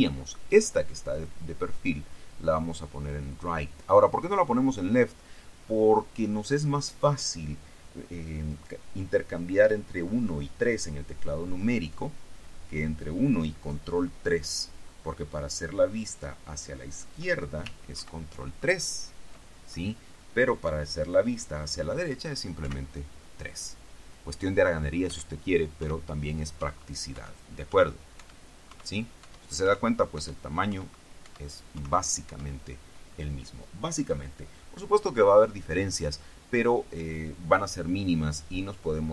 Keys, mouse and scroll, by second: 1.3 click, 3.4 click, 4.4 click, 18.1 ctrl+KP_3, 22.8 KP_3, 25.2-32.4 typing.